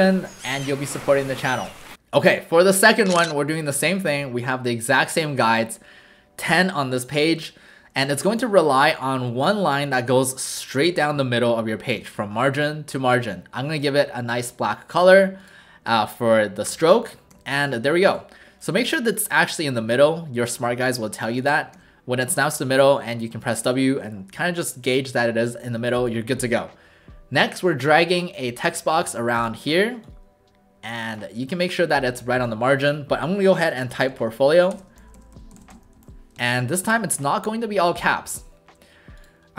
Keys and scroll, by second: 11.1 shift+v, 16.7 w, 17.3 w, 21.7 w, 25.4 w, 33.8-36.5 typing, 36.8 ctrl+a.